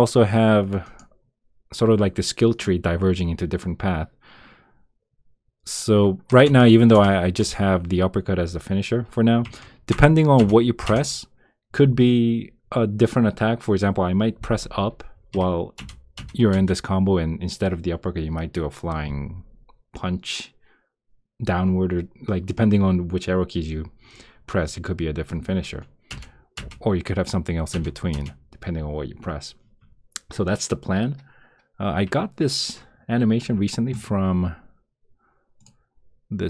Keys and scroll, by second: 6.4 Return, 7.4 Return, 9.9 Return, 10.8 Return, 15.7 Return, 16.5 Return, 26.1 Return, 27.7 Return.